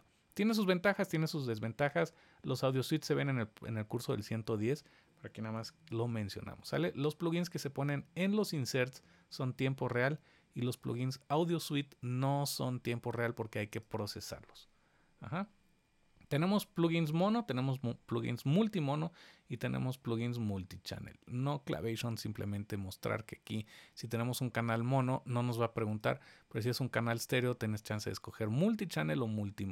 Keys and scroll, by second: 5.6 super+z.